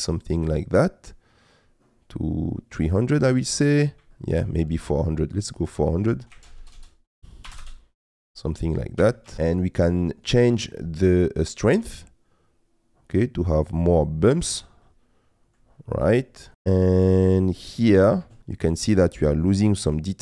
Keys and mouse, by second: 3.4 middle click, 4.1 shift+middle click, 5.5-7.6 drag, 6.6 KP_0, 6.8 KP_0, 9.0 g, 12.0-14.4 drag, 14.8 middle click, 16.7 middle click, 17.8 middle click, 18.8 middle click.